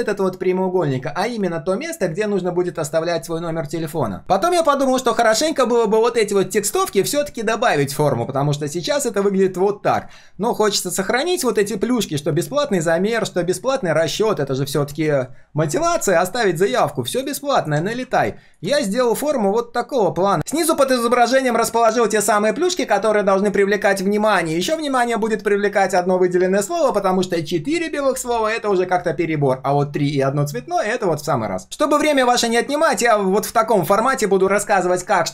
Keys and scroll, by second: 9.9 ctrl+z, 17.9 ctrl+v.